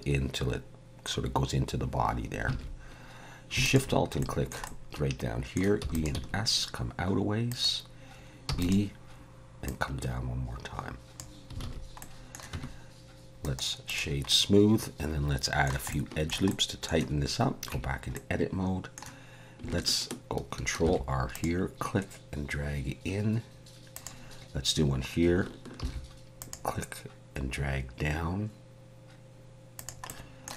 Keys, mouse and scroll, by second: 2.5 alt+a, 3.6 alt+shift+click, 4.2 shift+middle click, 4.6 middle click, 5.8 e, 6.2 s, 8.5 e, 9.6 click, 11.6 alt+a, 12.0 middle click, 12.5 Tab, 13.4 right click, 14.3 middle click, 15.9 shift+middle click, 16.5 middle click, 17.7 Tab, 18.1 middle click, 20.8 ctrl+r, 25.8 ctrl+r, 30.1 middle click.